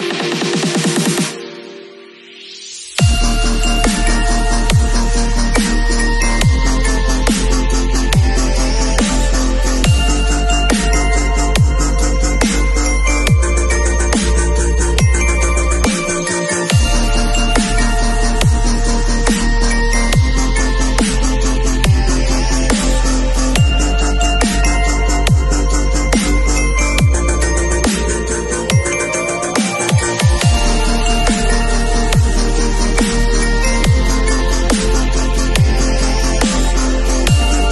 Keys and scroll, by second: 12.0 space, 13.4 shift+super+a, 27.8 super+i, 29.1 b, 32.9 [, 33.8 [, 35.6 ], 36.0 [, 36.5 ].